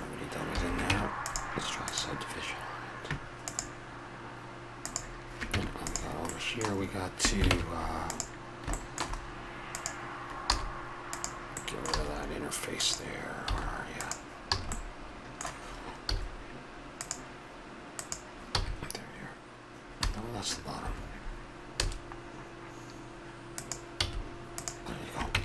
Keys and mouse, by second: 0.6 a, 0.9 Tab, 5.4 Tab, 7.5 ctrl+Tab, 9.7 right click, 10.5-11.6 drag, 10.5 a, 10.5 s, 12.0 a, 13.5 a, 14.5 a, 15.1 click, 15.8 click, 16.1 z, 17.9 click, 18.5 x, 19.7 click, 21.8 a, 24.0 x, 25.3 Tab.